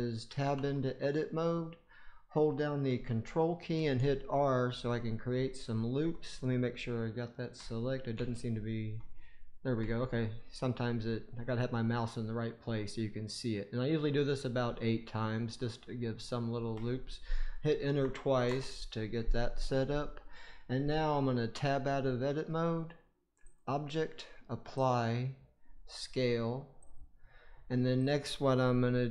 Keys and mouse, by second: 0.5 Tab, 3.6 ctrl+r, 5.6 ctrl+click, 8.1 ctrl+r, 21.4 Tab, 23.4-26.9 right drag, 23.4 typing, 28.0 click.